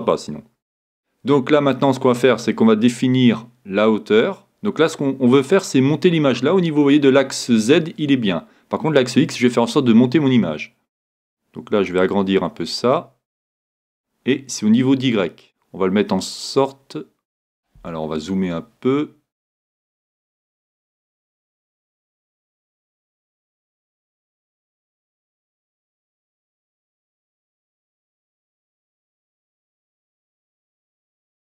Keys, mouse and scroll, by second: 3.7-5.5 scroll down 1, 5.5 scroll down 1, 5.8 scroll up 2, 6.8-8.7 scroll down 2, 8.7 scroll down 1, 11.9-13.7 drag, 13.3 scroll down 2, 13.4-15.7 middle drag, 14.7-16.7 drag, 18.0-19.8 scroll up 1, 19.8-22.4 middle drag, 26.4-28.2 drag, 28.7-31.4 drag.